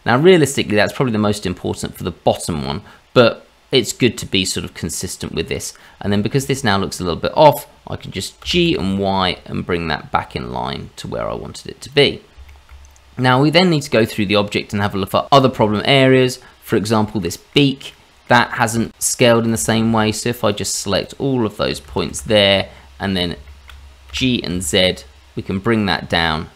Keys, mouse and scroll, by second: 0.1 middle click, 4.9 middle click, 6.1 shift+middle click, 6.8-7.4 scroll up 1, 8.4 g, 12.1 scroll down 2, 12.4 shift+middle click, 12.8-13.6 scroll up 1, 13.6-14.1 scroll up 3, 14.1 middle click, 15.7 shift+middle click, 16.9 scroll up 1, 17.2 middle click, 17.9 middle click, 18.7 shift+z, 19.8 click, 20.1 shift+click, 20.4 shift+click, 21.0 shift+click, 22.0 shift+z, 22.3 middle click, 23.0 scroll down 1, 23.4 shift+middle click, 24.0 g.